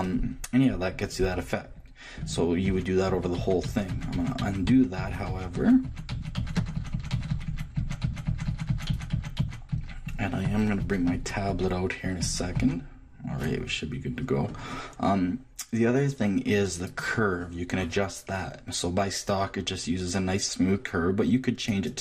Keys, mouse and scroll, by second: 1.0 middle click, 2.2 click, 13.6 ctrl+middle click, 16.9-18.8 drag, 21.7-22.0 drag.